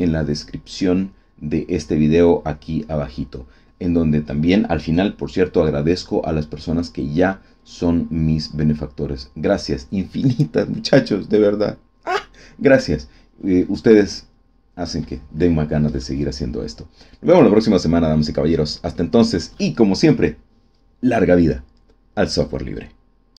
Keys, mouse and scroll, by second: 23.3 click.